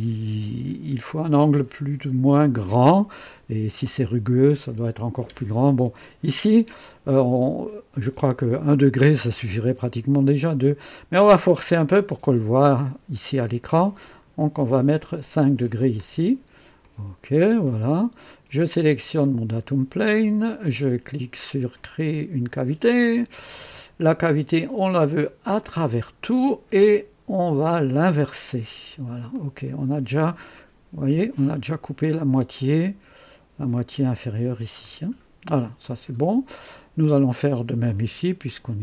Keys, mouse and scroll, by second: 8.0 scroll up 2, 10.9-11.9 scroll down 2, 15.8-16.4 drag, 16.8 click, 17.7-18.4 right drag, 19.2 click, 22.5 click, 24.8 click, 25.6 click, 27.6 click, 29.3 click, 30.5-31.6 drag, 32.8-33.5 drag, 34.8-37.0 drag, 37.0 click, 38.5 click.